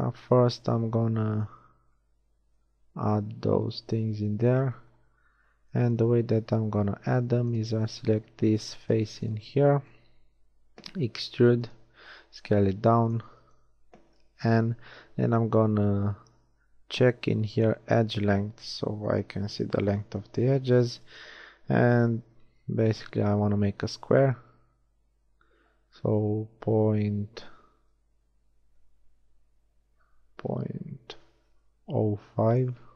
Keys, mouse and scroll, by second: 1.2 z, 1.8 z, 2.4 z, 4.6 z, 6.2 z, 7.0 z, 7.5-11.4 drag, 11.4 e, 12.2 s, 14.5 n, 17.6-18.8 drag, 21.8 s.